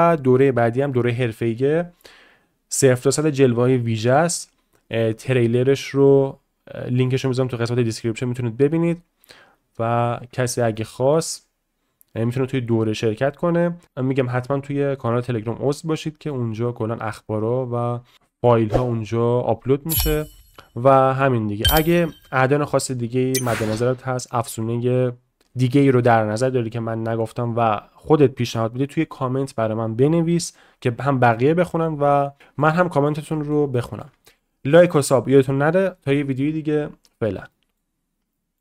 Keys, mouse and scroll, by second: 10.8-11.2 shift+middle drag, 13.8 middle click, 15.3-15.7 middle drag, 15.9-16.4 middle drag, 32.4 middle click, 32.8 shift+middle click, 33.3 shift+middle click, 33.7 shift+middle click, 37.6-38.6 middle drag.